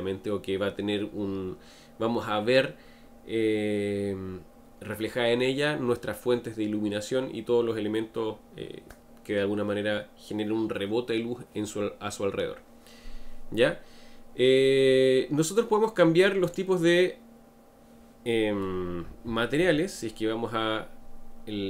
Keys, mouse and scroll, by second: 16.4 click.